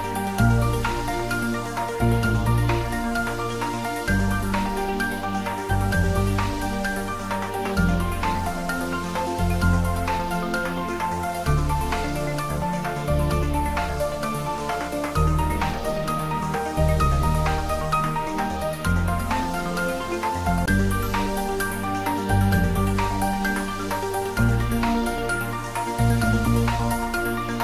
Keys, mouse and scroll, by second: 11.3 click, 11.8-12.1 scroll down 1, 13.8-15.7 drag, 15.7 shift+d, 18.1 y, 22.8 click, 23.7 3, 24.7-25.1 scroll up 1, 26.7 g, 27.0 y.